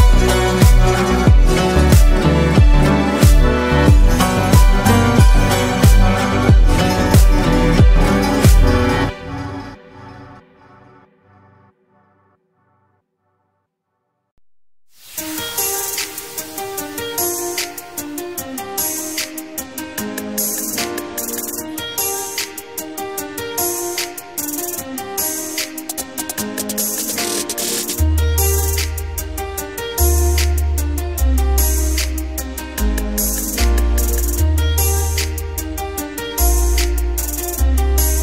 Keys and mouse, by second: 3.4-5.0 drag, 6.9-8.0 drag, 9.4-10.4 drag, 14.6 ctrl+shift+click, 21.2-25.9 drag, 26.6-27.7 drag, 28.3 click, 29.6-30.8 drag, 29.6-30.8 middle drag, 29.6-30.8 right drag, 31.7 ctrl+z, 32.4 ctrl+z, 33.6 ctrl+z, 35.2 click, 36.4 click.